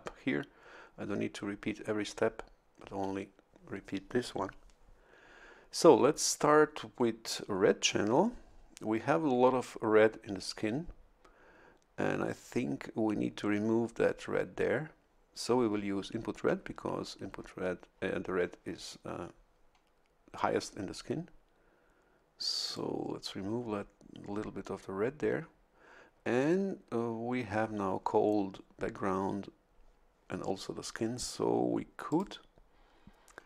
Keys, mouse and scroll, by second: 22.6 click, 32.1 click.